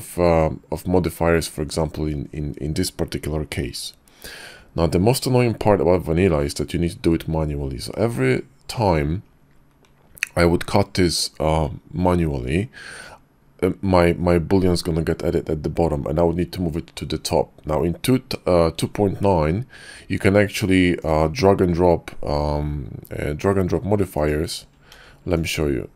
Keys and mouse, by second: 24.2 click, 24.9 ctrl+c.